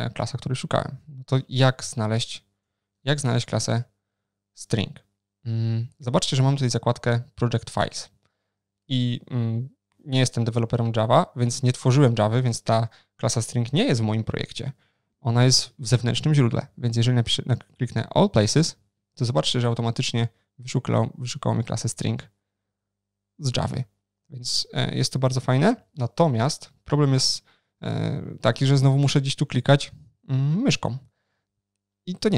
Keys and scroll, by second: 0.9 super+o, 1.2 ctrl+n, 3.1 shift+super+o, 3.1 ctrl+shift+n, 28.6 ctrl+shift+n, 28.6 shift+super+o.